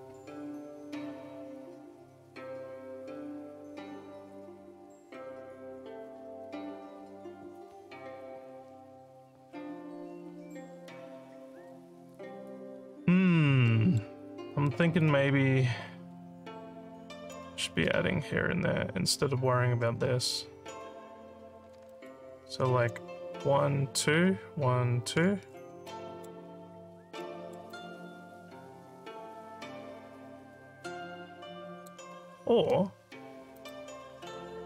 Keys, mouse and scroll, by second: 12.6 alt+scroll up 2, 13.7 alt+middle click, 14.2 alt+scroll down 1, 14.6 alt+middle click, 15.0-17.3 alt+drag, 21.9 alt+middle click, 25.9 alt+middle click, 27.3 alt+middle click, 27.7-31.8 alt+drag, 33.5 click.